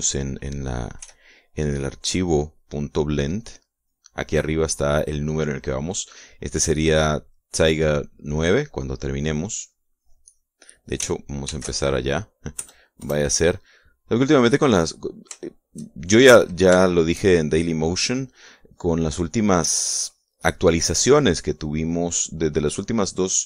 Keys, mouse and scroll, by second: 0.2 click, 1.6 f, 2.1 click, 3.4-4.6 drag, 9.5-11.2 drag, 12.0 ctrl+shift+s, 13.2 KP_Add, 13.6 KP_Enter, 15.2-16.8 middle drag, 17.4 shift+middle click, 18.7 click, 19.2 click, 23.1-23.4 drag.